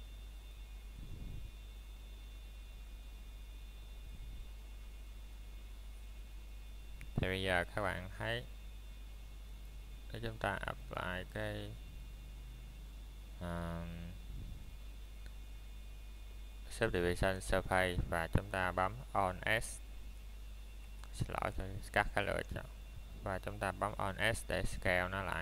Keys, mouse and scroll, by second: 0.8 click, 3.7-4.9 typing, 5.3 Return, 7.2 middle click, 7.8-9.0 scroll up 1, 9.0 middle click, 9.4-10.1 scroll down 3, 9.8 shift+middle click, 10.4 middle click, 11.0 scroll up 1, 11.5 middle click, 13.0 scroll down 1, 13.4 middle click, 19.5 click, 22.3 middle click, 23.2 scroll up 1, 23.8 middle click, 24.2 scroll down 1, 24.6 middle click, 25.1 scroll up 1.